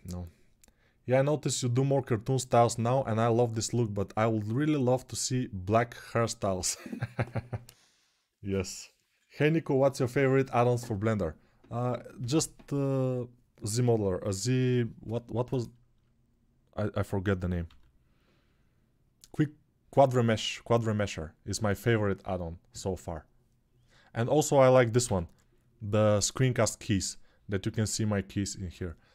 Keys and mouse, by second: 19.1-29.1 middle drag, 21.2 n, 24.8 n, 26.0 click, 28.4 n.